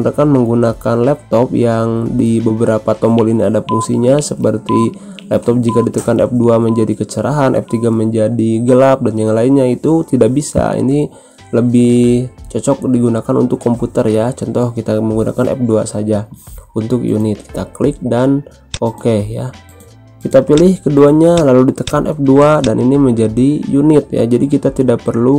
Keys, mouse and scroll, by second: 18.6 click, 23.8 F2.